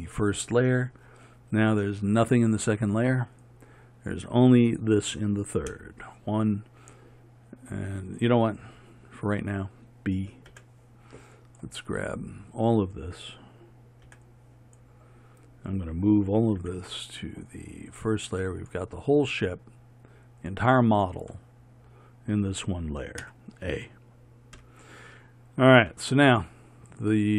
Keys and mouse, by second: 5.8 KP_1, 8.1-14.8 drag, 10.6 b, 16.6 m, 20.5-23.3 drag, 23.3 a, 24.6 KP_1.